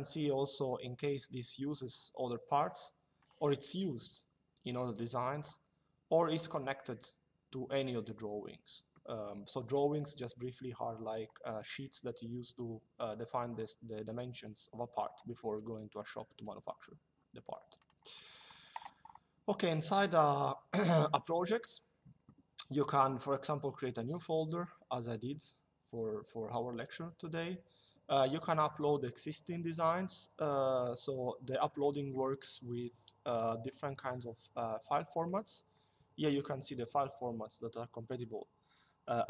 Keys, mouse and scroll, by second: 2.9 click, 6.0 click, 17.5 click, 30.5 click, 33.4 click, 34.9 click.